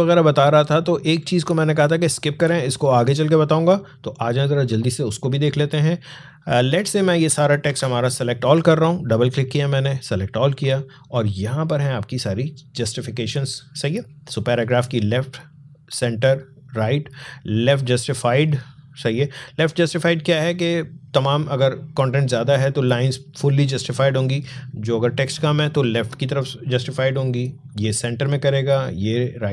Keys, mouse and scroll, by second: 0.4 alt+scroll down 1, 1.4 space, 1.7 click, 1.9 space, 2.6 alt+scroll up 1, 4.3 click, 7.5 ctrl+a, 11.7-14.4 drag, 15.2 click, 22.3 scroll down 1, 22.5 scroll up 1, 27.5 click.